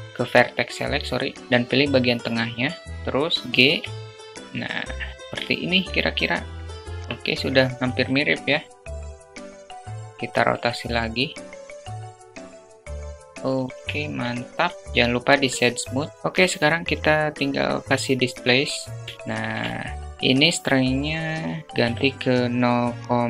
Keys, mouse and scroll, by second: 0.7 middle click, 2.6 middle click, 2.8 g, 6.1 Tab, 7.6 s, 9.5 click, 9.7 r, 10.9 `, 11.9 r, 12.9 Tab, 13.2-13.6 alt+middle drag, 13.9 click, 15.4-15.8 alt+shift+middle drag, 16.2-17.1 drag, 18.4-18.7 shift+middle drag, 20.0-23.2 drag.